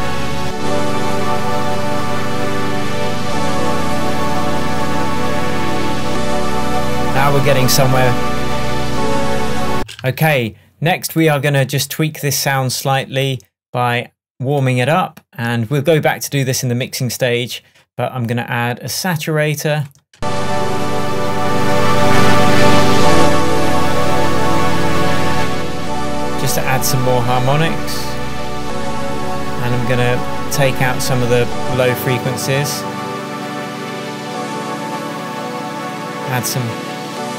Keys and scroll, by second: 9.8 space, 10.1 super+s, 20.2 space.